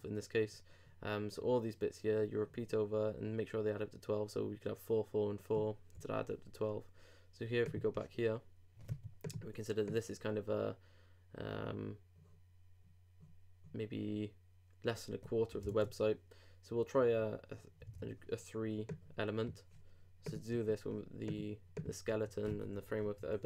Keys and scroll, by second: 15.8 super+Tab, 17.9 super+Tab.